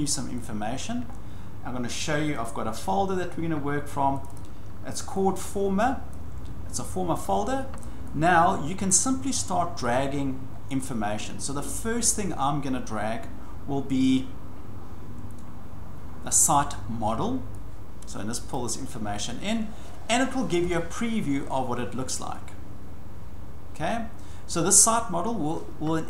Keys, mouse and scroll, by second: 0.4 click, 2.4 click, 4.2 click, 4.3 click, 6.1 click, 8.2-9.3 drag, 9.3-10.0 scroll down 4, 10.5-10.8 scroll up 5, 10.8 scroll down 1, 11.2 scroll up 1, 11.2 scroll down 1, 11.3 scroll up 1, 13.9 scroll, 18.5-23.6 drag.